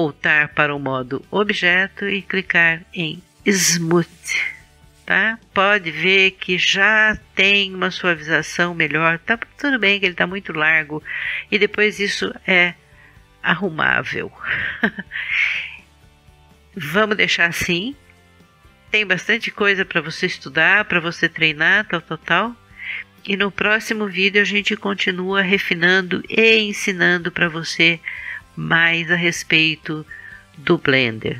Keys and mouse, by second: 0.4 Tab, 2.4 click, 4.2 middle click, 5.4-7.1 middle drag, 9.2-15.1 middle drag, 13.4 KP_1, 20.2-31.3 middle drag.